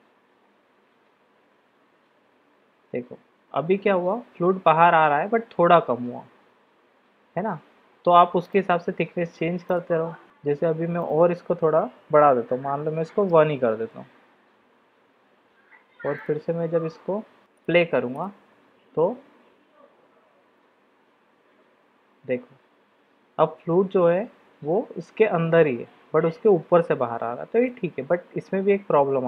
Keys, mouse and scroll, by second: 8.6 click, 9.8-14.6 drag, 17.5 drag, 18.2 click, 27.8-28.8 middle drag.